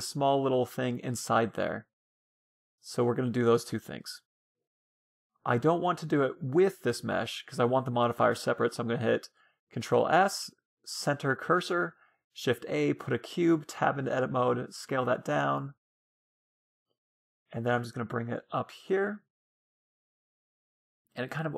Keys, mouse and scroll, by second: 2.6-5.9 middle drag, 5.0 Tab, 5.6 Tab, 6.0-7.9 middle drag, 8.2 shift+s, 10.7 shift+a, 12.9 Tab, 13.7 s, 15.9 middle click, 16.3 g, 18.2 g, 19.0 middle click, 19.3 g.